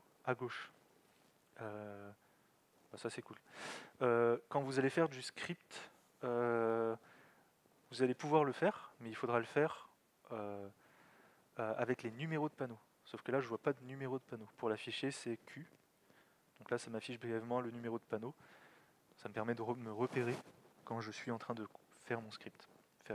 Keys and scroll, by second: 15.3 alt+x, 16.0 q.